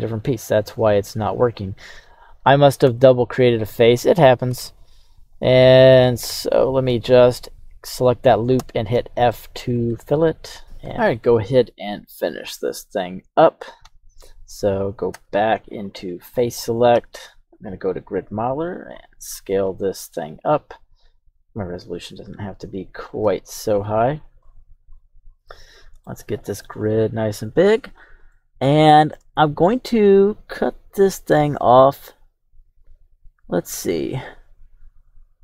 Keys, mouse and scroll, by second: 2.9 Tab, 4.5 Tab, 5.3 right click, 6.1 alt+shift+right click, 6.3 alt+shift+right click, 8.6 f, 9.3 middle click, 9.7 Tab, 11.4-12.8 scroll down 1, 12.8-13.5 middle drag, 13.8 KP_3, 15.1 Tab, 16.2 right click, 16.9 q, 20.1-20.6 scroll down 2, 20.8 scroll down 1, 28.3-35.4 shift+middle drag.